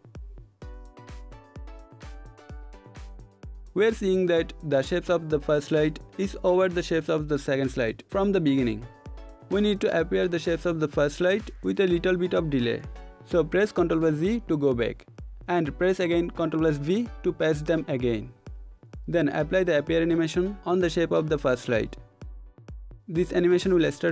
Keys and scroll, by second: 8.0 ctrl+z, 16.1 ctrl+v.